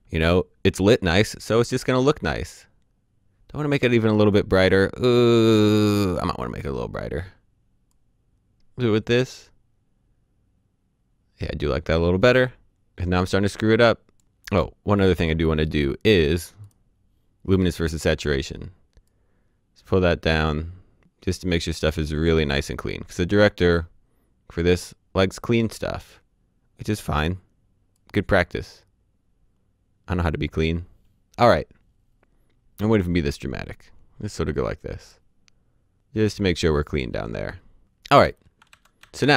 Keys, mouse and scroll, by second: 5.8 click, 7.2 click, 12.8 click, 14.9 click, 27.9 click, 32.7 click, 38.6 alt+d.